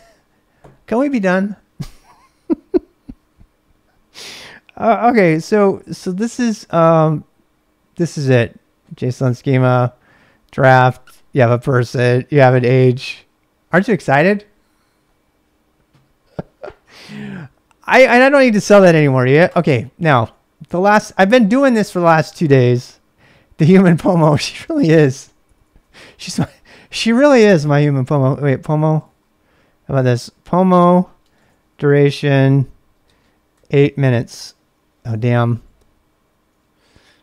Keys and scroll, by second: 20.5-23.1 typing, 24.3-25.6 typing, 28.5-33.8 typing, 34.1 Return, 34.8-37.2 typing.